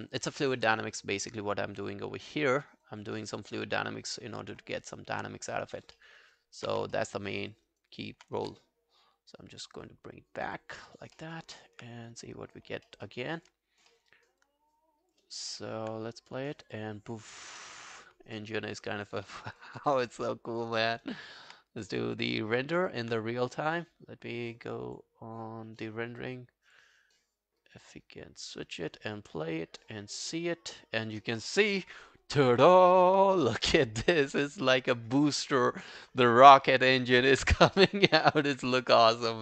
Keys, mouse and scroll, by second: 3.8-4.4 scroll up 5, 4.8 alt+middle click, 5.4 scroll down 2, 6.0 alt+middle click, 6.2 alt+right click, 6.7 q, 7.0 alt+middle click, 7.2 alt+right click, 7.5 alt+click, 7.7 alt+right click, 8.0 alt+click, 8.4 w, 11.2 alt+middle click, 11.4 alt+right click, 11.6 alt+click, 12.9 alt+middle click, 13.1 alt+right click, 13.4 alt+click, 13.7 alt+scroll down 2, 14.0 alt+middle click, 14.1 alt+right click, 14.5 alt+click, 15.3 alt+right click, 15.6 alt+middle click, 18.4 alt+middle click, 18.6 alt+right click, 18.9 alt+click, 19.3 alt+middle click, 19.5 alt+right click, 20.3 alt+click, 21.1 alt+right click, 22.8 alt+right click.